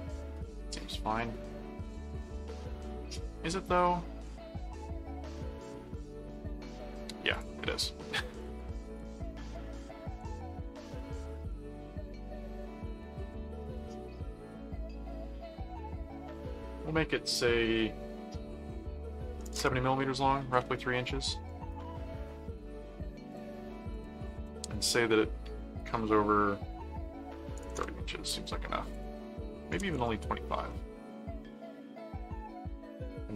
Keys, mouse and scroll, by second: 7.3 ctrl+click, 8.4 ctrl+alt+click, 8.9 ctrl+alt+d, 9.1 click, 9.5 right click, 10.9 alt+click, 11.5 alt+c, 11.5 alt+right click, 12.0 click, 12.8 right click, 13.7 click, 14.6 click, 15.9 click, 21.5 right click, 22.2 click, 23.3 click, 23.9 click, 28.9 click.